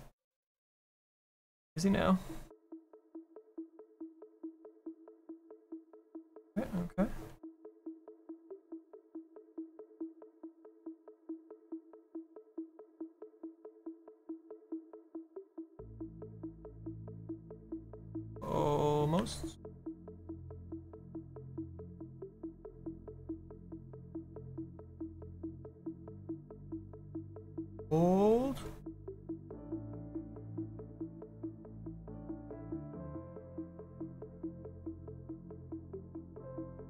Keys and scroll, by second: 26.8 s.